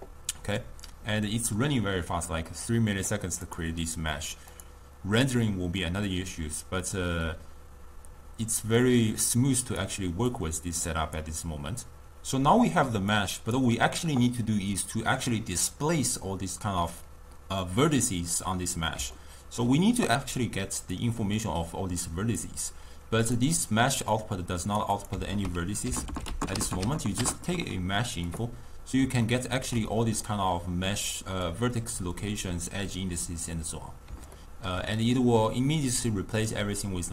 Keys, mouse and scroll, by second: 3.5 click, 4.6 click, 8.9-12.2 drag, 13.2 click, 14.5-17.5 middle drag, 19.2-20.4 ctrl+middle drag, 20.4-21.2 drag, 21.2-22.0 middle drag, 22.0-23.4 drag, 24.1-25.2 drag, 29.2-31.5 ctrl+middle drag, 31.5-34.4 drag, 34.4-37.1 ctrl+middle drag.